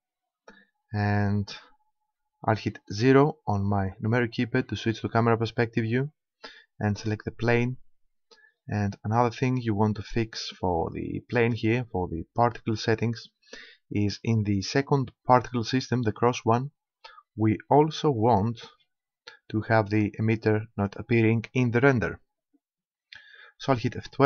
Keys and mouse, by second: 2.9 KP_0, 6.9-8.7 right drag, 9.5-11.3 drag, 11.3-14.5 middle drag, 20.4-22.1 drag, 22.1 middle click.